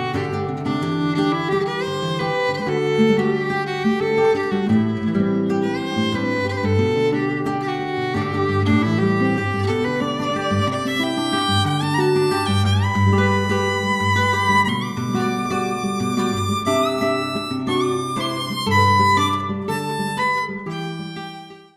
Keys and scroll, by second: 0.0 ctrl+v, 0.1 ctrl+c, 2.9 ctrl+c, 6.8 ctrl+c, 7.1 ctrl+v, 7.5 ctrl+v, 7.7 ctrl+v.